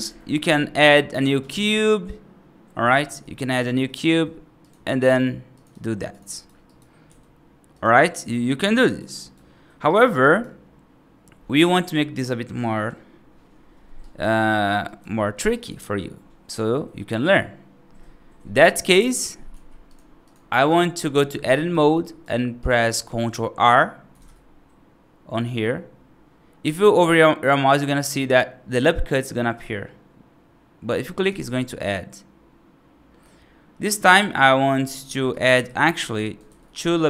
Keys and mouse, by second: 0.7 right click, 1.3 shift+a, 3.1 F2, 3.5 shift+a, 4.9 s, 5.6 g, 6.2 right click, 6.6 right drag, 6.9 g, 7.9 right drag, 8.7 right drag, 9.1 right drag, 9.7 right drag, 10.1 right drag, 13.9 right drag, 14.7 right click, 15.1 middle drag, 15.4 right drag, 19.4 x, 20.1 click, 20.4 right drag, 21.0 F3, 21.4 right click, 21.9 right click, 22.5 right click, 24.0 ctrl+r, 35.2 right click, 35.5 ctrl+z, 35.9 right click, 36.3 ctrl+r.